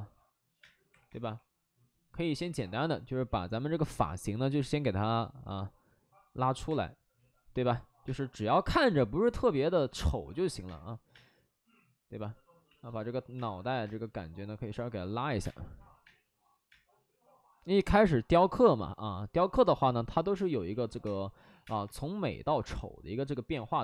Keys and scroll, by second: 0.5 space, 0.8 3, 1.0 3, 2.8 2, 4.5 space, 6.6 3, 8.0 space, 8.6 ctrl+z, 10.7 space, 11.0 space, 12.6 ctrl+z, 13.3 space, 13.8 space, 15.2 z, 15.3 space, 16.0 space, 16.6 space, 20.3 space, 21.4 3, 21.5 space, 21.8 3, 23.4-23.8 typing.